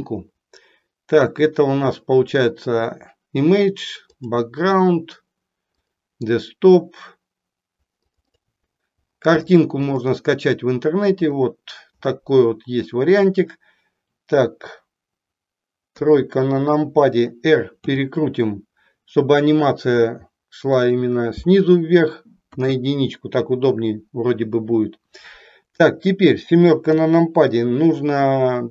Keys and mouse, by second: 15.9 KP_3, 17.9 r, 20.8 click, 22.4 KP_1, 26.9 KP_7.